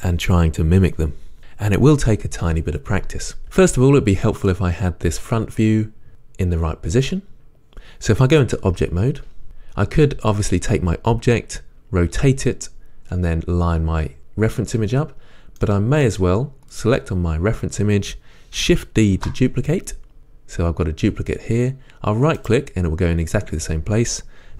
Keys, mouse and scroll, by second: 7.4-9.4 scroll down 2, 9.4 Tab, 16.8 click, 19.2 shift+d, 22.6 right click.